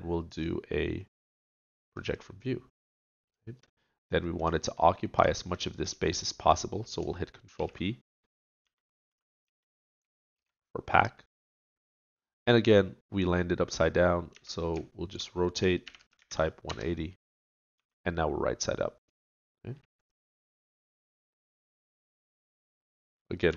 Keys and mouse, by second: 0.3 click, 8.6 ctrl+p, 8.6 a, 9.1 a, 9.5 a, 10.3 ctrl+p, 14.3 r, 14.7-16.0 drag, 17.8 a, 21.8 middle click.